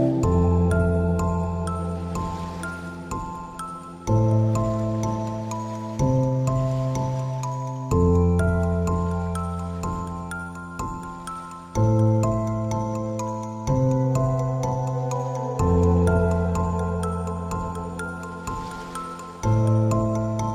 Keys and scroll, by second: 12.4 space, 19.6 space.